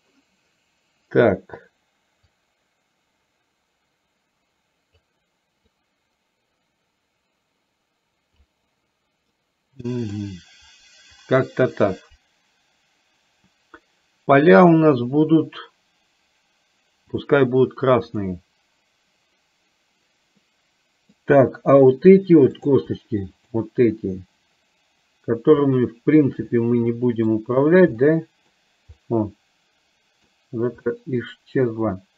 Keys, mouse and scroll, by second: 2.2-5.1 drag, 5.9-8.5 drag, 9.4-10.2 middle drag, 9.4 scroll up 1, 17.2 click, 18.2 click, 20.5 middle click, 22.6 click, 26.6-27.4 middle drag, 28.1-28.7 middle drag, 29.1-30.4 middle drag, 30.9-31.4 middle drag.